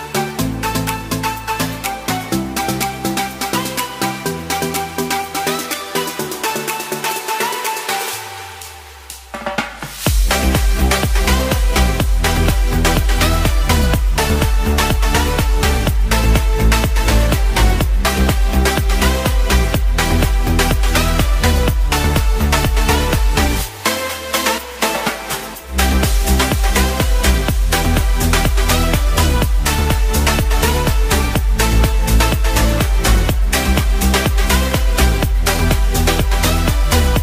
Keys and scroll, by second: 2.5 ctrl+Tab, 10.2 ctrl+Tab, 12.7 ctrl+t, 23.5 alt+Num_Lock.